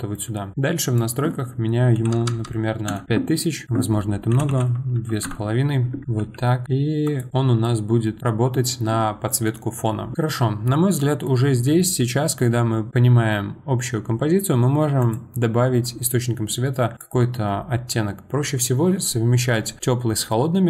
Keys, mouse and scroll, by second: 0.9-2.2 drag, 2.2 KP_0, 2.9 KP_0, 3.4 middle click, 3.6-6.0 drag, 6.0 middle click, 6.2 g, 15.0 click, 16.9 click.